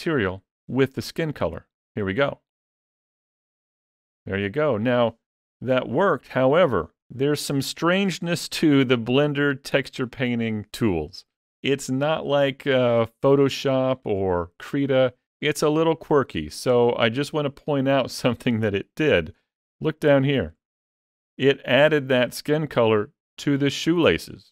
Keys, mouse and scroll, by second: 2.3 click, 19.7-20.0 scroll up 4, 20.0 shift+middle click, 20.8 middle click, 21.3 shift+middle click.